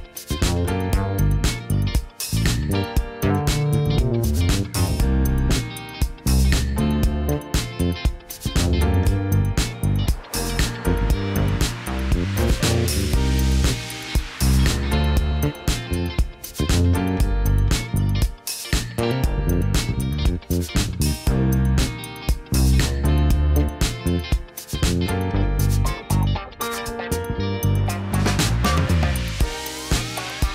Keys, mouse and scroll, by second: 0.0-3.1 typing, 1.5 KP_Enter, 7.4 click, 7.8 click, 8.7 click, 9.7 click, 9.9 click, 11.2 click, 11.6 KP_1, 12.7 g, 13.7 click, 14.1 g, 14.8 click, 15.8 a, 16.2 ctrl+t, 18.8 alt+s, 22.0 KP_1, 22.2 KP_3, 22.8 g, 23.4 click, 23.8 g, 25.7 click, 26.8 a, 27.2 ctrl+t, 29.1 click, 29.5 click, 30.0 g.